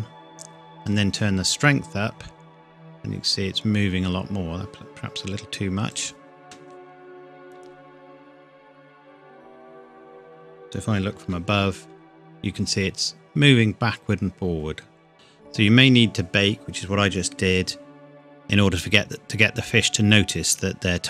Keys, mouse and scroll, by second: 0.9 click, 7.9 KP_7, 11.2 KP_7, 12.3 scroll down 1.